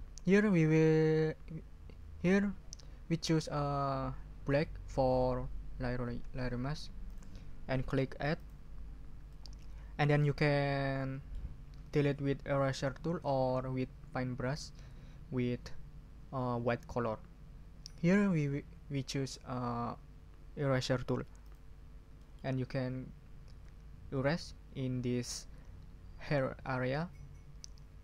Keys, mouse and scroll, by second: 7.0 click, 8.3 click, 9.3-10.3 drag, 11.0 click, 21.4 click, 22.2 ctrl+click, 22.7 ctrl+scroll up 2.